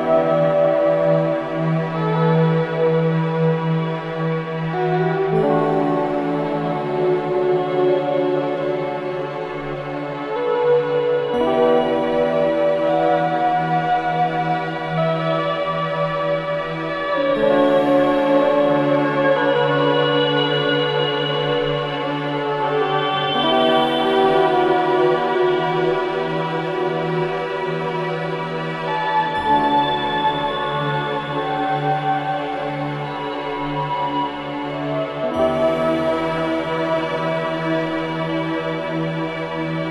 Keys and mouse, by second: 1.0 click, 1.9 click, 3.0-8.3 alt+drag, 9.5 alt+click, 10.3 click, 11.8-12.2 alt+drag, 12.7-13.1 alt+drag, 13.5 alt+click, 14.9-16.2 alt+drag, 17.5 click, 18.7 click, 20.4 alt+click, 21.1 alt+click, 21.7 ctrl+alt+click, 22.1 alt+shift+click, 22.4 alt+click, 22.9 alt+shift+click, 23.3 ctrl+alt+shift+click, 23.8 ctrl+alt+click, 24.2 alt+shift+click, 25.2 click, 26.0 click, 26.6 alt+click, 28.9-32.5 drag, 32.7 3, 33.5 alt+shift+click, 34.0 ctrl+alt+click, 34.8-38.8 drag, 37.6 typing, 39.1 typing, 39.5-39.9 drag.